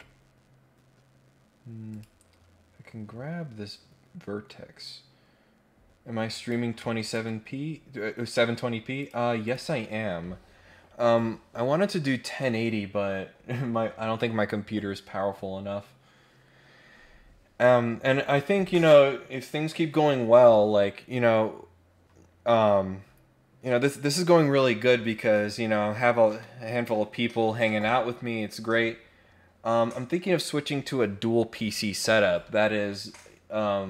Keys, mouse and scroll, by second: 1.9 click, 6.3 click, 7.0 ctrl+click, 8.9 click, 9.4 click, 17.6-18.0 scroll down 4.